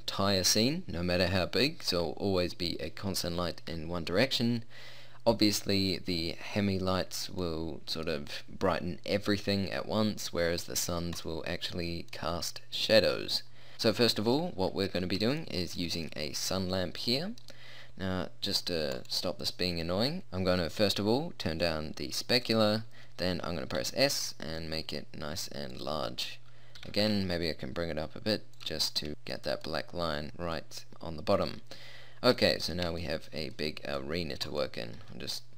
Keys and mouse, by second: 6.5 middle click, 11.9-13.1 middle drag, 18.9 right click, 19.5 middle click, 20.2-21.7 middle drag, 23.8-24.9 middle drag, 23.8 s, 26.8 g, 30.9-32.5 middle drag, 34.0 middle click, 35.1-35.5 drag, 35.1 s.